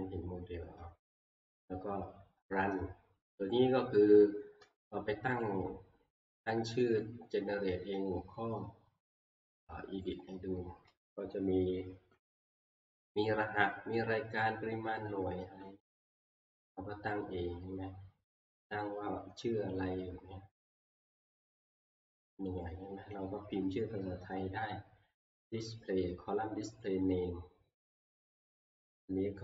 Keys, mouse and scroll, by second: 1.4 middle click, 5.4 click, 10.1 click, 20.7 click, 22.6 click, 28.1 click.